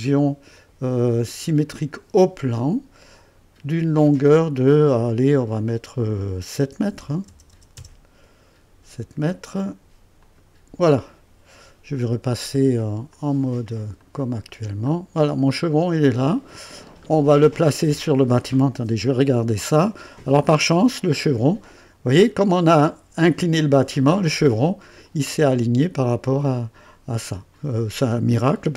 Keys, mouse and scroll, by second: 1.7 click, 3.9 click, 6.9 KP_7, 7.2 KP_0, 7.7 KP_0, 10.2 click, 10.2 typing, 13.1 click, 14.0 click, 14.9 scroll up 1, 15.5-18.5 drag, 18.9 typing, 19.9-20.2 scroll up 1, 20.4-22.3 right drag, 23.3 typing.